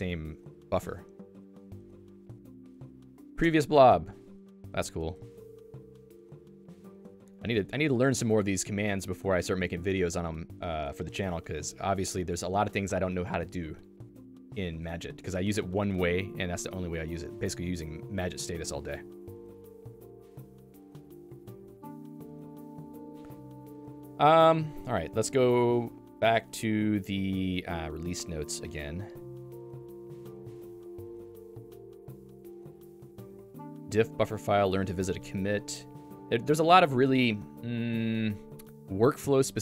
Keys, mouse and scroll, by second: 28.1 click, 28.4 click, 29.8 click.